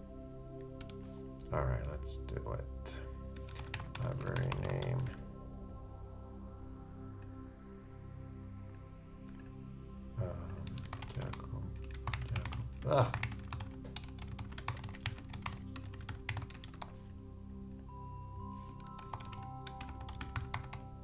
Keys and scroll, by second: 3.3-5.6 typing, 10.8 shift+Return, 10.9 shift+g, 11.8 super+m, 11.9 shift+super+a, 12.8 super+o, 13.0 shift+super+a, 13.2 shift+i, 14.6 shift+space, 14.7 shift+g, 15.8-16.8 typing, 18.7-21.0 typing.